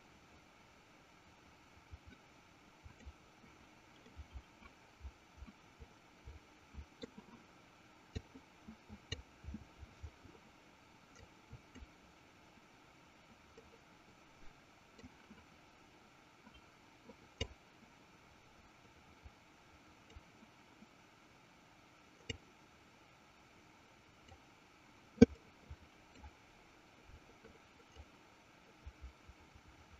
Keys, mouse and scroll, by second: 0.2-3.9 drag, 4.2-7.3 middle drag, 8.7 click, 11.6 click, 13.7-15.5 middle drag, 17.8-20.8 drag, 22.7-25.2 drag, 25.8 middle click, 28.3-29.9 drag.